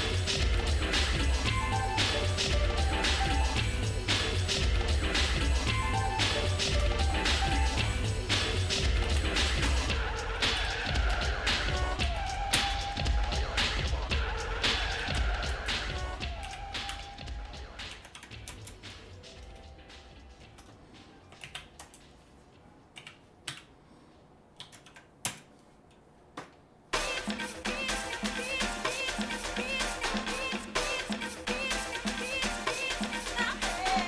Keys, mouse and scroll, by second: 0.7 shift+click, 1.2 shift+middle click, 3.1 ctrl+s, 4.1 shift+middle click, 4.7 middle click, 6.6 shift+c, 7.3 scroll up 1, 7.7 middle click, 9.1 alt+d, 10.6 r, 15.1 alt+d, 16.4 r, 19.6 shift+middle click, 21.4 alt+d, 23.0 r, 26.5-28.8 shift+middle drag, 29.2 shift+middle click, 33.4 click.